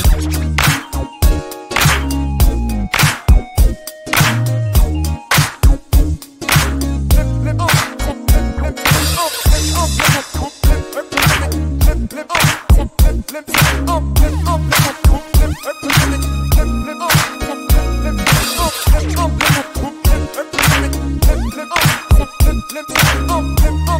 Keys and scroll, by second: 7.8 g, 10.5 y, 21.5 shift+a.